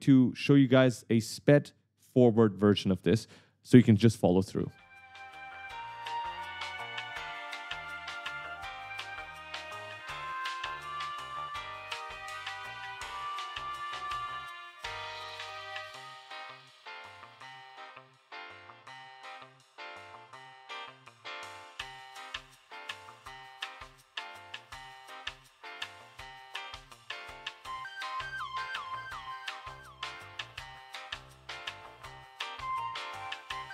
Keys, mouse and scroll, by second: 0.0-0.7 typing, 5.3 right click, 5.8 shift+click, 6.2 right click, 6.7 shift+click, 6.9-7.7 typing, 7.1 right click, 7.3 shift+click, 7.8 shift+click, 8.6 shift+click, 8.8 right click, 9.4 right click, 9.6 shift+click, 11.8 right click, 12.0 shift+click, 12.6 a, 12.9 shift+click, 13.4 shift+click, 14.0 shift+right click, 14.3 shift+click, 14.6-17.4 typing, 14.7 right click, 15.3 shift+click, 16.9 shift+click, 17.7 shift+click, 18.2 shift+click, 18.7-19.9 typing, 18.7 right click, 18.8 scroll up 1, 20.1 shift+click, 20.5 right click, 20.9 shift+click, 21.3 right click, 22.2 shift+click, 22.4 shift+click, 22.6 shift+click, 23.4-25.1 typing, 23.5 ctrl+click, 24.3 shift+click, 24.8 shift+click, 25.3 shift+click, 25.8 shift+click, 26.1 shift+click, 26.4 right click, 26.7 shift+click, 27.2-30.3 typing, 27.2 ctrl+click, 27.4 right click, 28.3 shift+click, 29.0 shift+click, 30.0 shift+click, 30.3 right click, 30.6 shift+click, 31.1 right click, 32.4-33.5 typing, 32.5 right click.